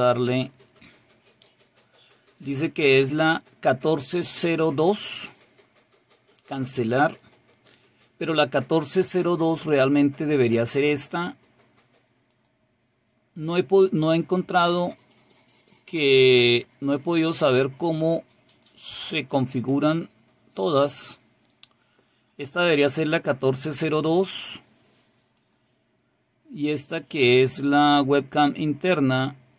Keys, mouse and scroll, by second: 0.5 click, 7.3 click, 9.3 click, 12.3 click, 14.6 click, 16.6 click, 18.7 click, 25.4 click.